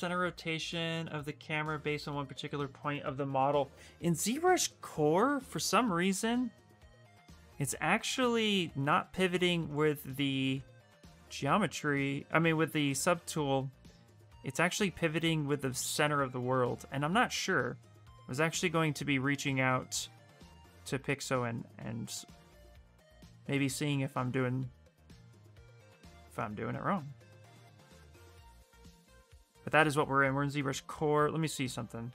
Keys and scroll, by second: 7.9 f, 16.6 f, 17.1 f.